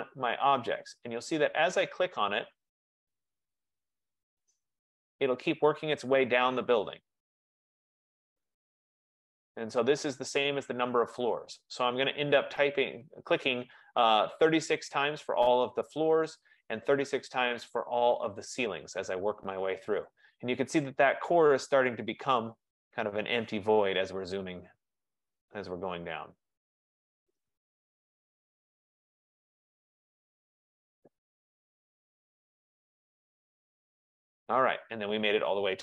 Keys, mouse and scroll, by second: 0.0 click, 0.8 click, 1.3 click, 1.8 click, 2.1 click, 2.3 click, 2.6 click, 2.7 click, 2.9 click, 3.1 click, 3.3 click, 3.6 click, 3.8 click, 4.0 click, 4.7-12.4 drag, 13.0 click, 13.3 click, 13.5 click, 13.7 click, 13.9 click, 14.2 click, 14.3 click, 14.6 click, 14.8 click, 15.0 click, 15.7-18.3 drag, 18.9 click, 19.1 click, 19.3 click, 19.5 click, 19.7 click, 19.8 click, 20.1 click, 20.2 click, 20.5 click, 20.7 click, 20.9 click, 21.1 click, 21.3 click, 21.5 click, 21.8 click, 21.9 click, 22.1 click, 22.4 click, 22.6 click, 22.9 click, 23.1 click, 23.3 click, 23.5 click, 23.7 click, 24.1 click, 24.3 click, 24.5 click, 24.7 click, 24.9 click, 25.1 click, 25.3 click, 25.6 click, 25.9 click, 26.0 click, 26.2 click, 26.4 click, 27.1-30.3 drag, 31.0 click, 31.8 click, 32.0 click, 32.3 F15, 33.4 click, 34.1 click.